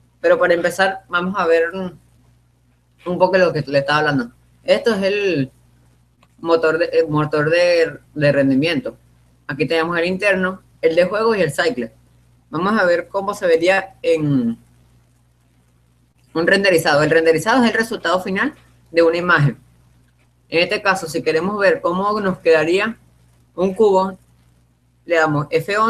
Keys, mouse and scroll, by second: 6.7-8.4 drag, 14.0 p.